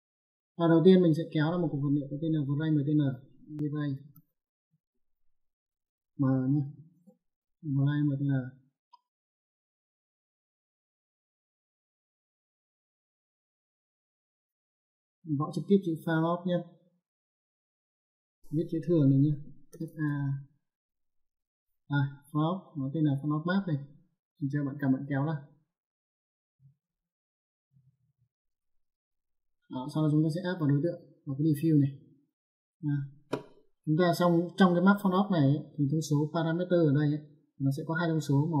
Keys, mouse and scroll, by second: 0.0 middle click, 2.2 click, 3.3 v, 3.6 r, 3.8 a, 4.3 y, 6.3 m, 11.0 click, 12.5 click, 15.2 click, 17.9 Caps_Lock, 19.4 f, 19.6 a, 26.4 click, 30.3 click, 31.9 click.